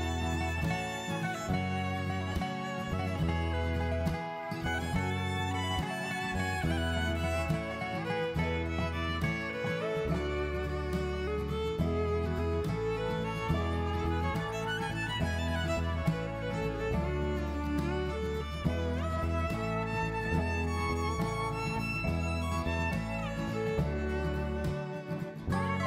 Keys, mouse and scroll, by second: 0.6 Tab, 2.1 middle click, 2.7-3.0 scroll up 1, 3.0 middle click, 3.0 click, 3.5 click, 4.8 i, 9.7 alt+e, 15.4 middle click, 19.5 click, 21.1 middle click, 22.3 right click, 23.8 middle click.